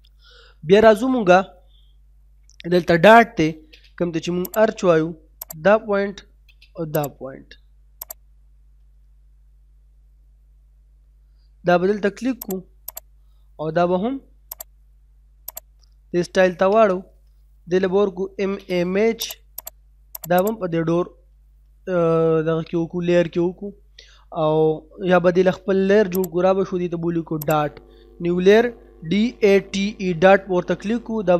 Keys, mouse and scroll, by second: 1.9 scroll up 1, 2.5 middle click, 3.3 l, 3.5 space, 3.7-4.5 scroll up 1, 4.5 click, 6.2 space, 8.3-8.9 scroll down 1, 8.9 middle click, 12.1-12.4 scroll up 1, 12.4 click, 17.4-18.1 typing, 19.2 click, 22.4 middle click, 22.8 scroll down 1, 23.0 middle click, 23.9 scroll down 1, 24.2 middle click, 24.4 scroll up 1, 26.2 click, 28.6-29.6 typing.